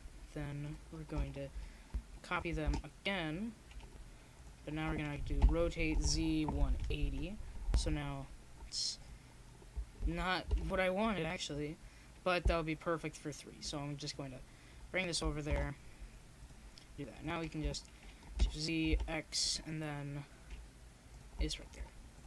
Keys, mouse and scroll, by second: 1.3 shift+d, 6.5-8.3 drag, 7.6 shift+d, 14.3 middle click, 14.8-17.0 drag, 15.3 shift+d, 18.3 r, 22.0 click.